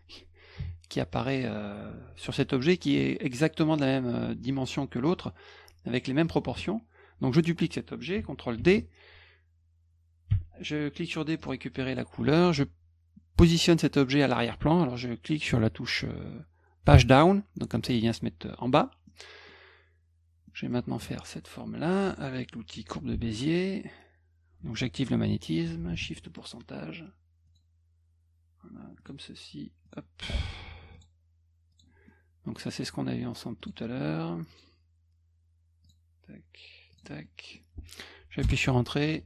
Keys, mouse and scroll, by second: 1.2 middle click, 8.6 ctrl+d, 10.3 d, 11.4 click, 12.1 F1, 19.1 middle click, 20.5 middle click, 23.1 b, 25.8 shift+ù, 26.2 middle click, 27.4 click, 29.0 click, 29.8 click, 30.9 click, 31.7 click, 32.1 middle click, 33.6 click, 34.5 click, 35.8 click, 36.9 click, 37.2 middle click, 38.4 Return.